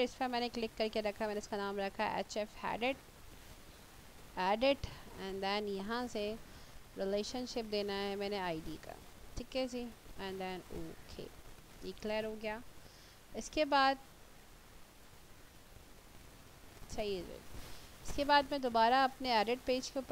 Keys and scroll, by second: 2.8-4.7 typing.